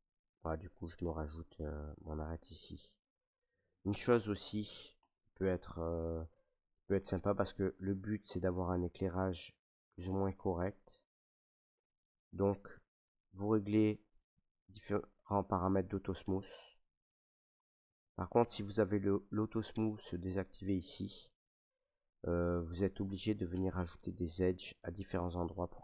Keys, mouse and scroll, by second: 0.0-0.5 scroll, 1.0 middle click, 2.1 middle click, 2.1 middle click, 2.2 middle click, 2.9 middle click, 3.5 shift+middle click, 3.6 shift+middle click, 4.0 Tab, 4.6 middle click, 4.6 middle click, 4.7 middle click, 4.9 Tab, 6.9 middle click, 7.7 middle click, 7.9 middle click, 8.0 middle click, 8.8 middle click, 8.8 scroll, 9.2 middle click, 9.2 middle click, 10.1 middle click, 10.1 scroll, 10.8 shift+middle click, 11.0 shift+middle click, 11.5 middle click, 14.1 click, 14.7 click, 15.1 click, 16.2 click, 16.8 click, 17.5 click, 18.0 click, 19.2 click, 19.7 click, 20.6 middle click, 21.2 shift+middle click, 21.5 middle click, 21.6 middle click, 21.6 shift+middle click, 21.7 middle click, 21.8 shift+middle click, 22.6 shift+middle click, 23.1 middle click, 23.5 Tab, 25.1 Tab.